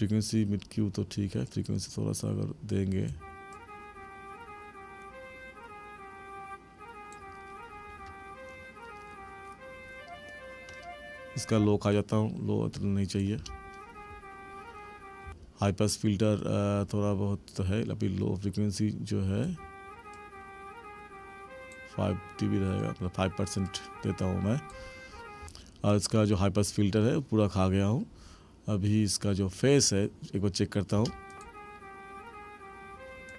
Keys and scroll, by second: 3.1 space, 11.5 space, 13.3 space, 15.2 space, 19.4 space, 25.4 space, 31.0 space.